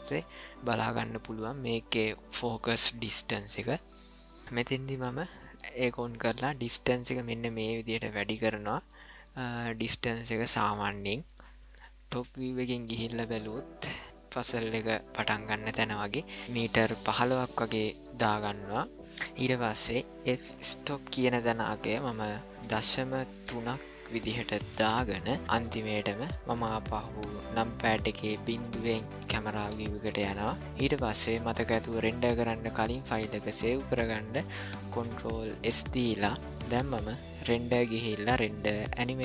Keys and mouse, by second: 0.1-1.4 middle drag, 6.6-8.5 drag, 8.9-11.2 middle drag, 12.1 KP_7, 20.8-25.4 drag, 25.4-26.1 middle drag, 26.5 KP_0, 29.8 shift+middle click, 35.6 ctrl+s, 37.5-39.2 drag.